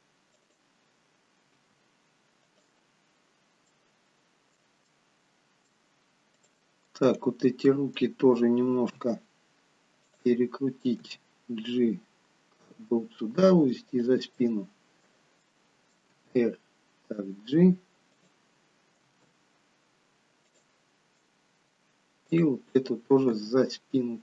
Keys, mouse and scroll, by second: 1.7 r, 3.8 middle click, 5.1 middle click, 6.5 click, 7.0 middle click, 9.0 r, 11.1 g, 14.4 middle click, 15.6 middle click, 16.3 g, 19.0 r, 21.3 middle click, 22.7 click, 23.5 g.